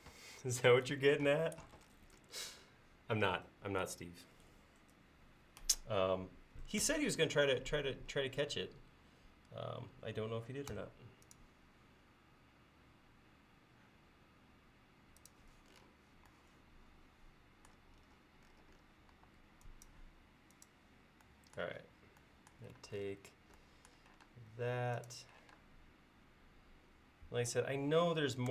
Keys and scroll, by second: 1.3 space, 6.9 r, 19.2 e, 21.8 l, 22.9 space, 24.3 space, 25.5 q.